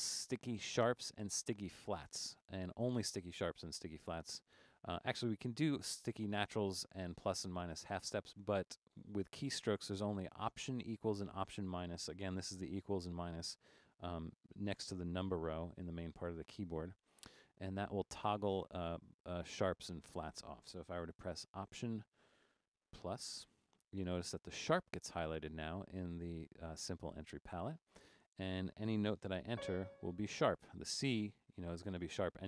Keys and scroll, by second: 23.1 alt+=, 29.5 c.